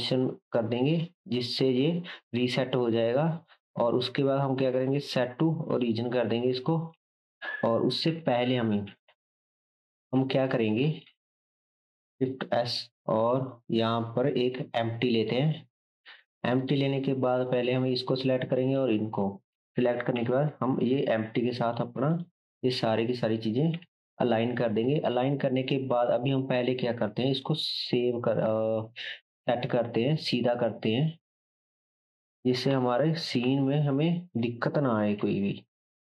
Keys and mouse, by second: 6.5-6.9 shift+middle drag, 6.5-6.9 shift+right drag, 7.1 ctrl+z, 9.0 /, 11.8-17.3 shift+middle drag, 11.9 shift+s, 13.0 shift+a, 16.0 s, 17.3-22.9 shift+drag, 20.1 ctrl+p, 22.9-36.0 middle drag, 23.7 KP_7, 27.3 r, 33.4 KP_3, 35.2 r.